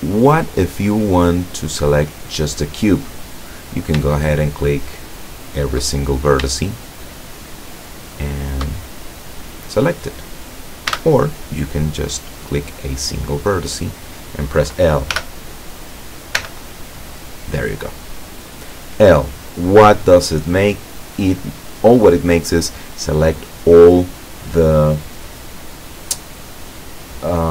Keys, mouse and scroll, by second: 0.0 right click, 4.2 shift+right click, 4.6 shift+right click, 5.2 shift+right click, 6.0 shift+middle click, 6.8 shift+right click, 7.2 shift+right click, 7.9 shift+right click, 8.5 shift+right click, 9.1-10.4 shift+middle drag, 11.0 a, 12.2 right click, 13.2-14.3 middle drag, 15.3 l, 16.5 l.